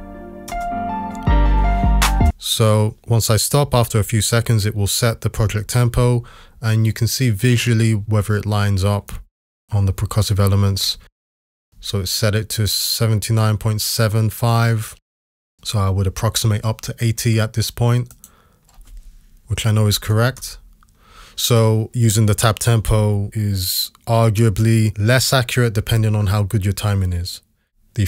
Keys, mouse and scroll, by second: 0.0-0.5 typing, 2.1 space, 19.8 typing, 20.4 Return, 24.4 typing.